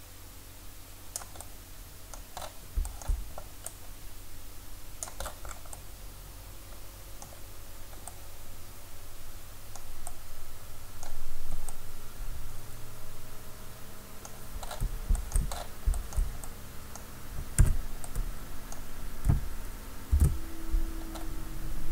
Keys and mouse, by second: 2.9-3.7 middle drag, 3.7-5.7 drag, 15.3 middle click, 17.6 Tab, 20.1 ctrl+r.